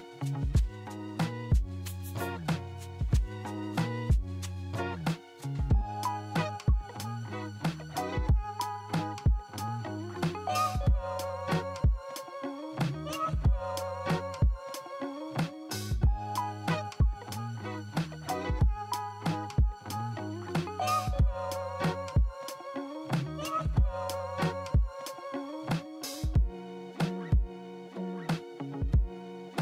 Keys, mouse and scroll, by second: 0.6 double click, 7.8 alt+middle click, 12.5 alt+middle click, 21.7 -, 22.0 5, 24.9 Return.